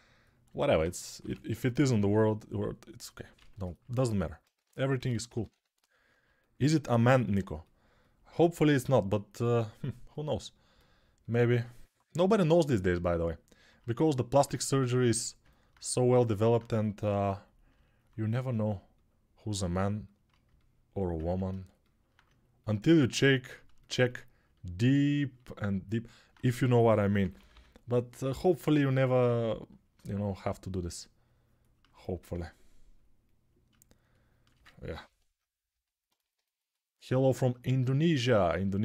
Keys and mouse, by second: 1.0-1.8 typing, 3.1 a, 4.3-5.3 typing, 14.3 a, 14.8 a, 26.5 g, 27.0 ], 27.1 ], 27.3 ].